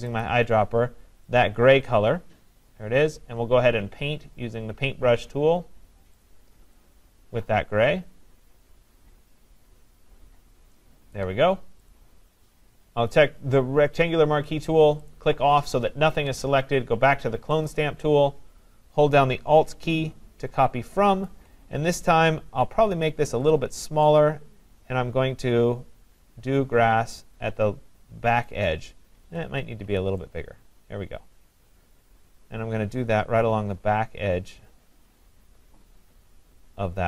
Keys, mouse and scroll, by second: 0.2 click, 1.4 click, 6.3 click, 11.2 click, 12.0 click, 15.1 click, 17.7 click, 21.3 alt+click, 22.9 [, 23.3 [, 23.7 [, 28.5 click, 29.3 ], 29.5 ], 29.9 ].